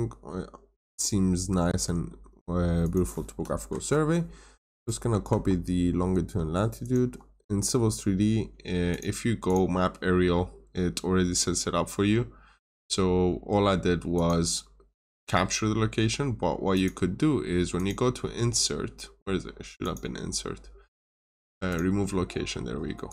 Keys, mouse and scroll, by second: 3.6 ctrl+c, 3.7 typing, 5.2 alt+Tab, 6.7 alt+click, 8.8 click, 10.9 scroll down 1, 11.6 scroll up 1, 12.6 click, 14.9 scroll up 1, 16.6 click.